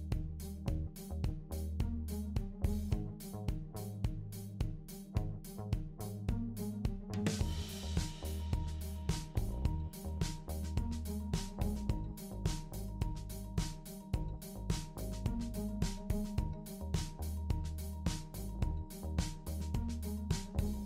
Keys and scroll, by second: 4.3 BackSpace, 7.5 super+d, 14.6 BackSpace, 18.8 super+d.